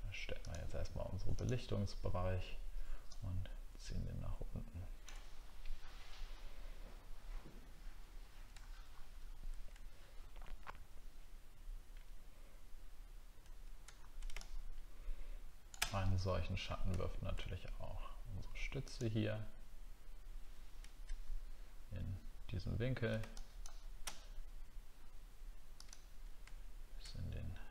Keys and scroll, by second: 5.4 alt+scroll down 1, 8.5 alt+scroll up 1, 9.2 alt+scroll up 1, 13.9 alt+scroll down 1, 16.9 alt+scroll up 1.